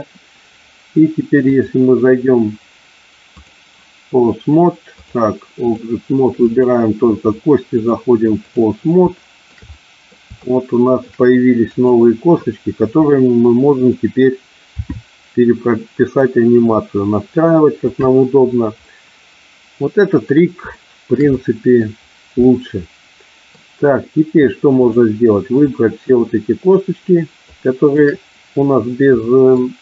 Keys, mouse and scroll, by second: 1.6-3.7 drag, 5.1-6.0 drag, 6.6 click, 7.9-8.7 drag, 9.3 shift+middle click, 9.8-10.2 middle drag, 10.6-11.2 shift+middle drag, 11.8 click, 14.0 drag, 15.0 r, 18.1 click, 19.0-20.5 middle drag, 20.8-21.3 shift+middle drag, 21.5 middle click, 22.6-23.7 middle drag, 25.8-26.3 shift+drag, 27.6-28.2 shift+drag, 29.3 middle click.